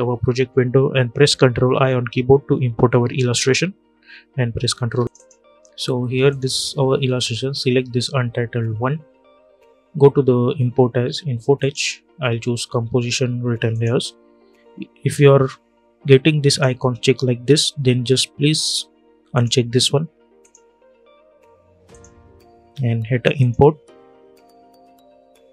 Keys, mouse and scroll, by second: 1.1 ctrl+0, 4.6 ctrl+i, 5.0 click, 11.3 click, 13.5 click, 16.2 click, 19.0 click.